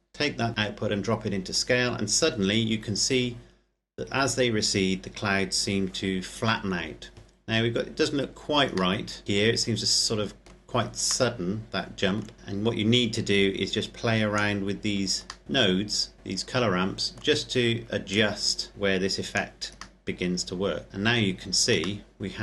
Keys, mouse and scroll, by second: 3.5-5.5 scroll down 1, 8.9 middle click, 11.5 middle click, 12.3 click, 14.7-15.3 scroll down 1, 15.3 middle click, 18.0 click, 19.9 middle click, 20.9-22.0 scroll down 1, 22.0 middle click.